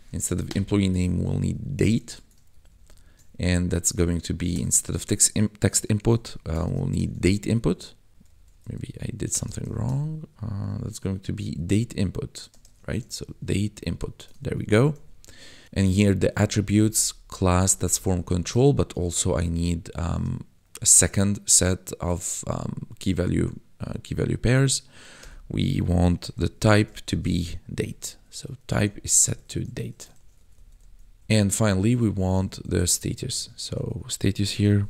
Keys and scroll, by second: 0.4 BackSpace, 0.8 d, 0.9 a, 1.2 e, 1.9 ctrl+s, 2.5 ctrl+Right, 3.9 Left, 4.4 ctrl+shift+Left, 5.9-8.2 typing, 8.7 Right, 9.2 BackSpace, 12.5 shift+d, 12.7 a, 12.9 t, 13.7 Down, 13.8 Tab, 14.4 ctrl+s, 14.9 Right, 16.3 ctrl+Right, 17.5 Right, 18.6 ctrl+Right, 19.4 ,, 20.1 space, 26.1 t, 27.7 Right, 28.0-29.6 typing, 30.1 ctrl+s, 30.3 Right, 31.2 ctrl+Left, 32.3 Left, 33.2 ctrl+shift+Left, 34.1-34.8 typing.